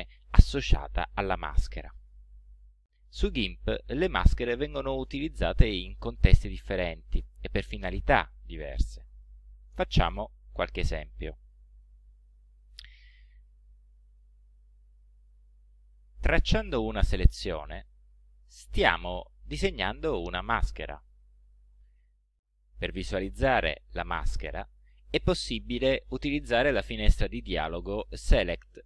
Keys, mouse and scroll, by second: 15.4 click, 16.2 click, 18.0 click, 24.1 right click, 26.7 right click.